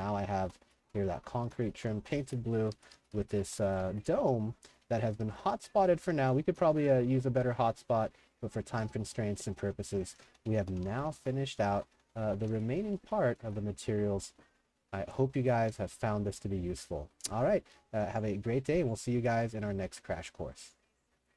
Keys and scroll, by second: 0.0-14.3 typing, 15.4 w, 15.7 s, 16.4 w.